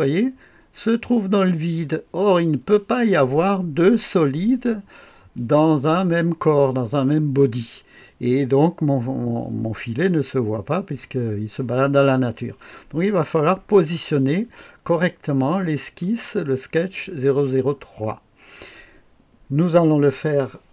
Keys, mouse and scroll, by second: 16.0 click.